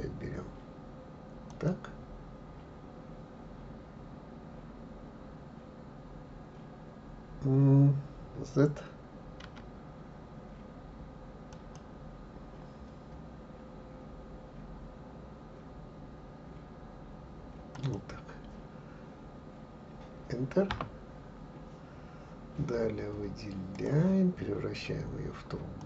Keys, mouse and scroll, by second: 23.7-25.8 drag.